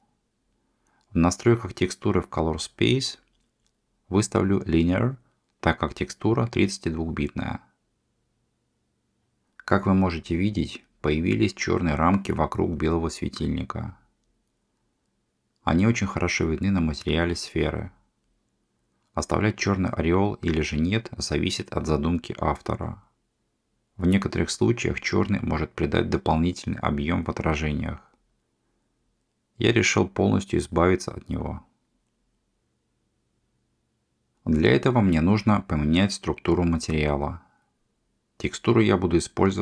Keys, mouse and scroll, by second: 1.0-4.1 drag, 5.2-6.5 middle drag, 7.0-8.6 shift+middle drag, 35.1 click, 37.0 g.